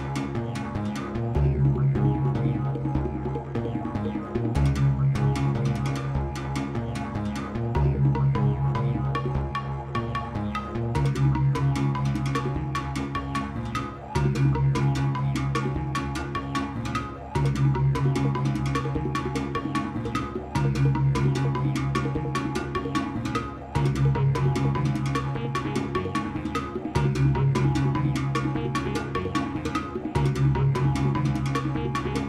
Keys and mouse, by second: 0.9 space, 2.1 Page_Up, 7.0-11.5 drag, 14.0 Left, 15.6 Right, 17.4 ctrl+s, 20.5 click.